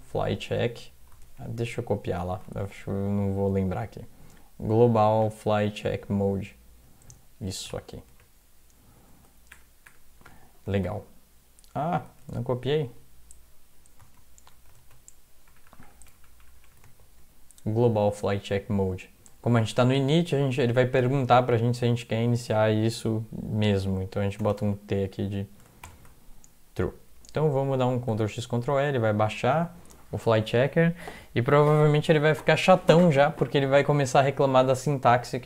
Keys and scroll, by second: 0.1 typing, 1.3 alt+Tab, 8.2 alt+Tab, 9.5 ctrl+BackSpace, 9.9 ctrl+BackSpace, 10.7 ctrl+v, 12.3 alt+Tab, 14.8 alt+Tab, 15.5-16.6 typing, 16.9 ctrl+v, 24.4-25.9 typing, 25.1 End, 28.1 ctrl+x, 28.4 ctrl+e.